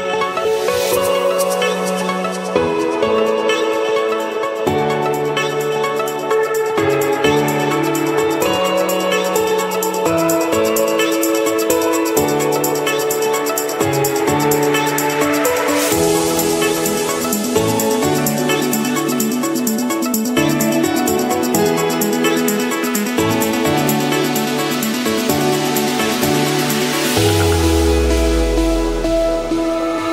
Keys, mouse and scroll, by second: 0.4 Return, 1.6 Escape, 3.2-4.4 drag, 5.4 click, 7.0 Escape, 8.2 click, 10.2 click, 11.7 click, 12.0-12.5 scroll down 4, 12.5-14.2 scroll up 18, 14.9 click, 15.3 scroll up 2, 15.7 Escape, 15.7 scroll, 16.6 click, 17.2 Escape, 18.1 click, 20.3 right click, 21.3 right click, 21.9 click, 23.4 click, 24.5 click, 26.2-28.2 typing, 29.0 Return.